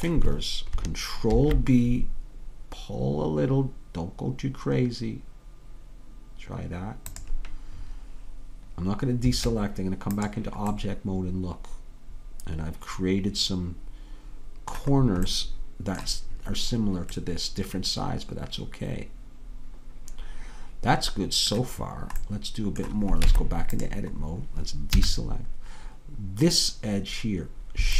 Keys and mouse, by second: 1.4 ctrl+b, 9.3 Tab, 15.3-20.6 middle drag, 23.3 Tab, 25.1 a.